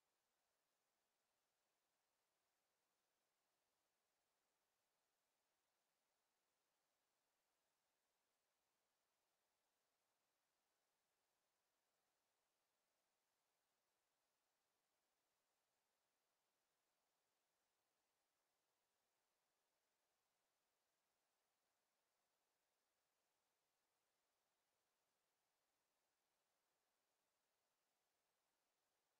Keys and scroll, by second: 24.6 w.